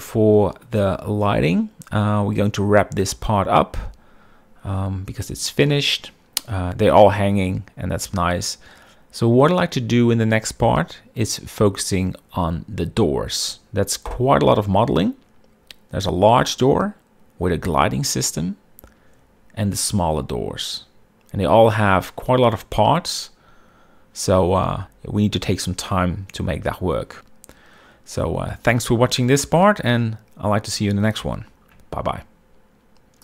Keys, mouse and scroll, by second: 6.5-7.3 shift+middle drag.